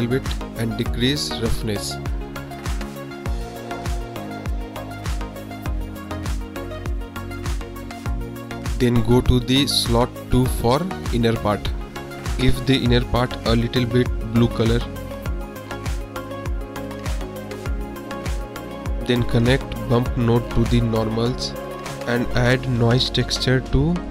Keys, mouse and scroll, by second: 1.7-3.2 drag, 3.6 click, 4.7-5.7 drag, 9.6-11.4 drag, 12.4 click, 13.7 click, 18.2 shift+a, 21.7-22.9 drag, 23.7 shift+a.